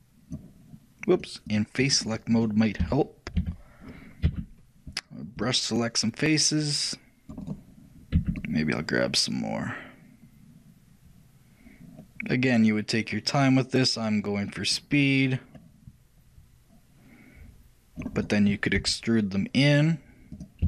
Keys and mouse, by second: 2.5-4.3 drag, 2.5-4.1 right drag, 3.0 a, 3.6 a, 4.4 c.